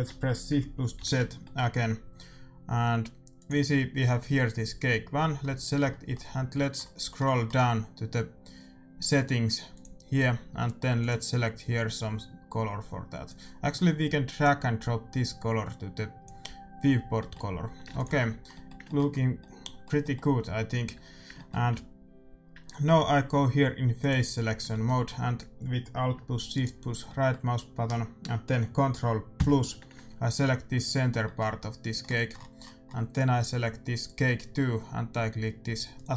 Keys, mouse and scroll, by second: 1.0 shift+z, 1.4-3.3 middle drag, 3.3-5.1 drag, 5.4-9.6 middle drag, 9.6-12.7 drag, 11.6 middle click, 14.3-16.2 drag, 17.1-19.7 middle drag, 17.6 a, 17.8 ctrl+s, 20.9 Tab, 21.7 a, 23.9-25.8 drag, 24.6-26.6 middle drag, 26.5-28.0 right drag, 27.0-28.9 middle drag, 28.0 click, 29.3 ctrl+KP_Add, 30.8-32.8 middle drag, 33.9-35.7 drag, 35.9-36.1 drag.